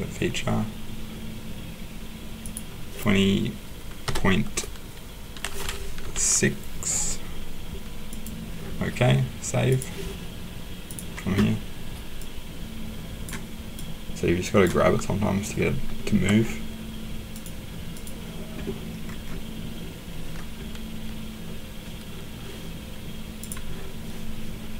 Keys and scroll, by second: 4.0 ., 6.0 6.